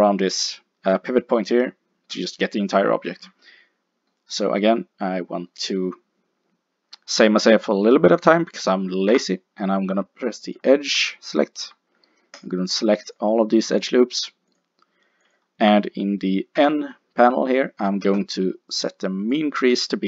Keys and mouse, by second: 8.9 ctrl+Tab, 11.1-12.4 middle drag, 12.4 click, 16.6 n.